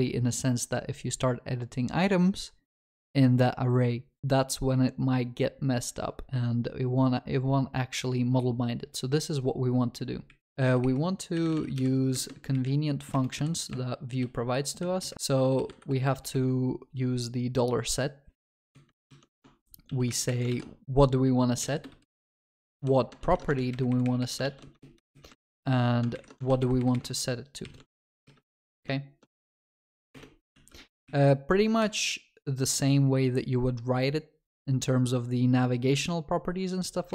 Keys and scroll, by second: 15.1 Return, 19.1 ctrl+shift+Right, 19.8 ctrl+x, 20.5 ctrl+v, 23.2 ctrl+shift+Right, 23.5 ctrl+x, 24.4 ctrl+v, 26.1 ctrl+shift+Left, 27.8 ctrl+x, 28.6 ctrl+shift+Right, 34.5 ctrl+s.